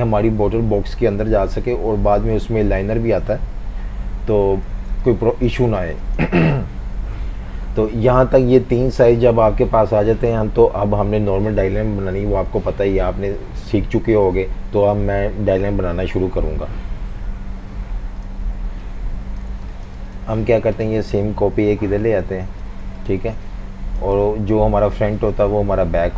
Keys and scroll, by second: 4.7-6.2 typing, 7.0 F18, 17.3 F19, 18.5-20.2 typing, 23.3-24.4 typing.